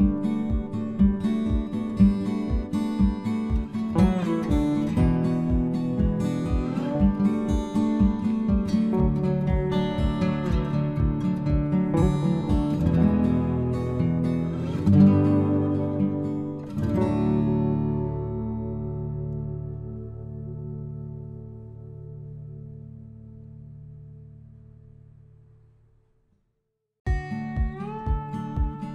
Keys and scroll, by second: 8.9 ctrl+c, 11.0 ctrl+v.